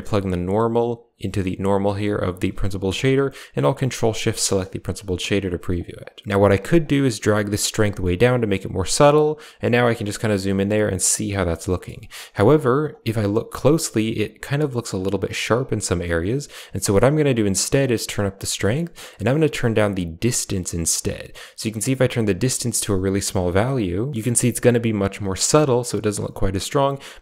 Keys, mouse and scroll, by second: 0.1-2.2 drag, 3.8 ctrl+shift+click, 4.2 click, 5.6 click, 6.5 ctrl+z, 6.7-8.2 drag, 9.0 click, 11.7 shift+middle drag, 17.7 click, 18.5 middle click, 19.6-24.1 shift+drag.